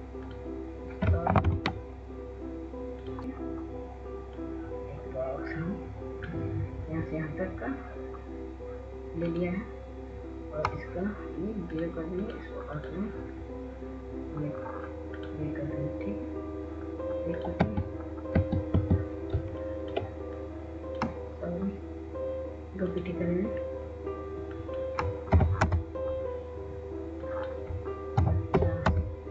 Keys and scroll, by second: 6.1 w, 21.0 w, 21.7 w, 22.1 w, 22.7 ctrl+space, 23.2 ctrl+space, 23.3 ctrl+space, 28.6-28.9 typing.